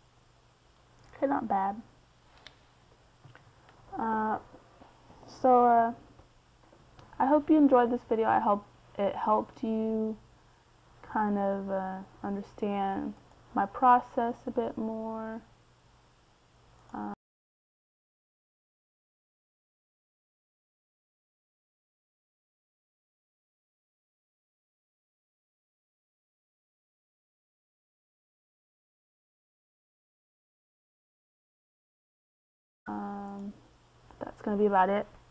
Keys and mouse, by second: 2.8-3.8 middle drag, 12.8-19.1 middle drag, 19.1-21.8 drag, 21.1-23.2 right drag, 24.1-26.2 drag, 33.7-35.3 middle drag.